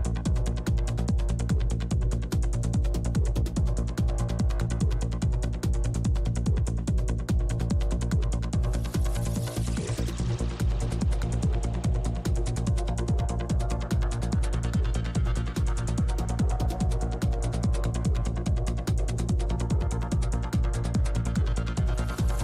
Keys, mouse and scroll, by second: 0.7 f, 1.1-7.6 drag, 6.9-9.1 middle drag, 7.6 shift+f, 7.9-13.4 drag, 8.6 shift+f, 10.4 middle click, 13.4-18.4 drag, 17.8-19.1 middle drag, 18.8-22.4 drag, 21.8-22.4 middle drag.